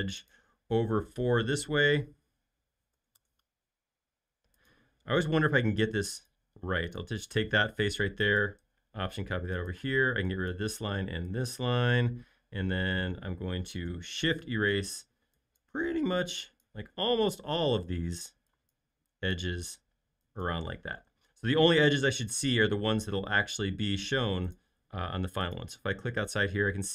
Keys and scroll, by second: 3.1 4, 3.3 Return, 6.8 space, 7.3 m, 9.8 e, 21.2 space.